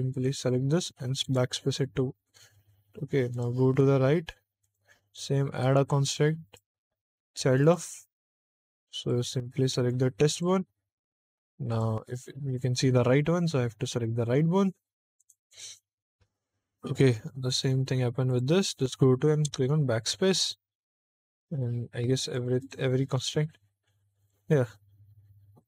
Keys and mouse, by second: 0.1 click, 1.2 BackSpace, 3.2 click, 4.5 click, 5.4 click, 6.4-7.6 drag, 8.9 click, 10.2 click, 11.6 click, 15.1 click, 18.2 click, 19.4 BackSpace, 22.1 click, 22.5 click, 24.1 click, 25.5 click.